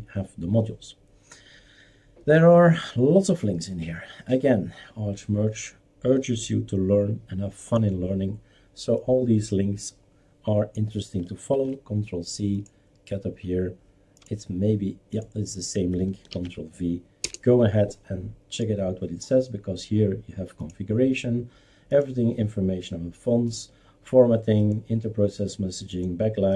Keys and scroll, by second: 11.5 ctrl+c, 16.3 ctrl+v, 17.2 Return.